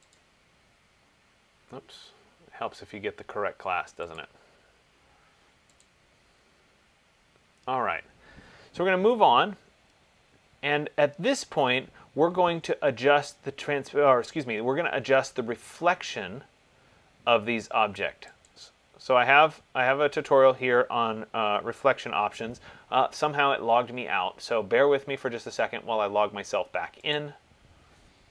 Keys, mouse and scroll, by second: 0.4 click, 4.5 click, 7.6 scroll, 7.6 middle click, 8.2 middle click, 9.6 middle click, 11.0 scroll, 14.6 middle click, 18.7-23.7 drag, 27.3-28.3 drag.